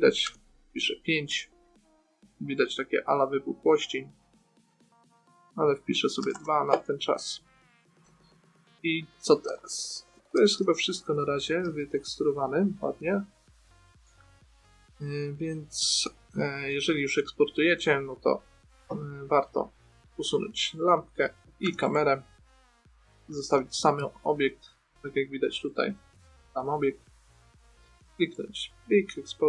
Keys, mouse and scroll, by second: 2.9 middle click, 5.8-7.6 drag, 7.8 middle click, 12.0 n, 13.3 middle click, 17.0 middle click, 19.2 Tab, 20.8 Delete, 22.0 Delete, 23.6 shift+f, 26.1-28.1 drag.